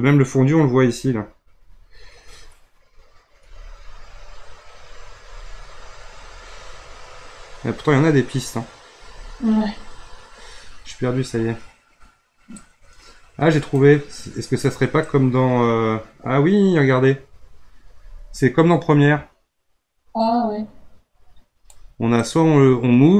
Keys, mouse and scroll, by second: 2.4-3.3 scroll up 3, 3.3-4.2 scroll down 3, 4.2-4.6 scroll up 3, 4.6 scroll down 3, 4.8 scroll up 1, 5.4-5.8 scroll down 3, 5.8 scroll up 2, 6.0 scroll down 1, 6.1 scroll up 3, 6.8-7.6 scroll up 4, 7.6-8.9 scroll up 9, 8.9-10.0 scroll down 14, 10.0-11.0 scroll up 5, 11.0-12.5 scroll down 5, 12.5-18.2 drag, 22.2-23.1 drag.